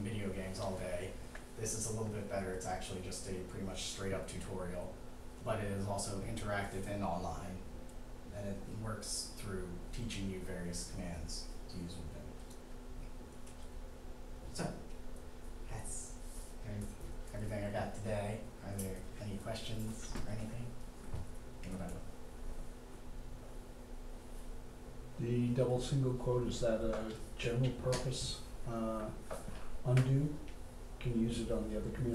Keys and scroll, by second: 13.1 typing.